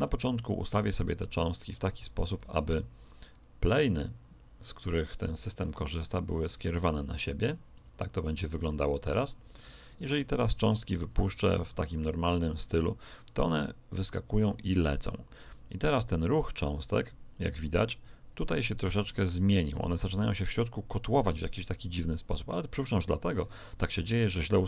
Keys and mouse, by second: 0.7 r, 3.3 right click, 3.9 r, 7.4 a, 7.7 a, 9.8-11.0 right drag, 11.0 middle click, 11.7 click.